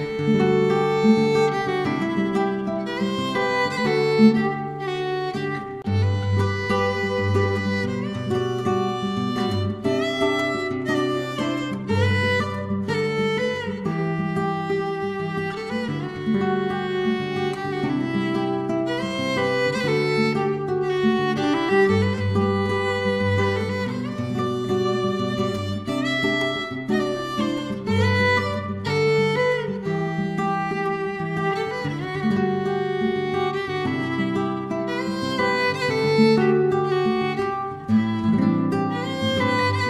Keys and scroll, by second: 0.3 Home, 0.4 Return, 0.7 Delete, 6.3 ctrl+c, 6.7 ctrl+v, 8.9-9.7 typing, 23.6-27.6 typing, 25.3 Return, 29.2 F2, 29.3 BackSpace, 29.5 2, 29.5 Return, 29.9 ctrl+d, 29.9 F2, 30.0 BackSpace, 30.1 3, 34.7 ctrl+z, 35.1 ctrl+d, 35.3 BackSpace, 35.5 4.